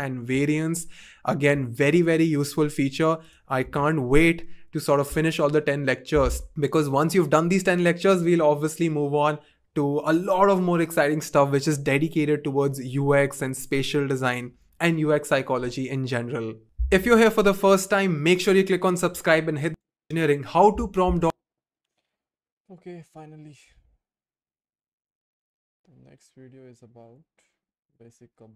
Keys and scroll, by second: 3.6 2.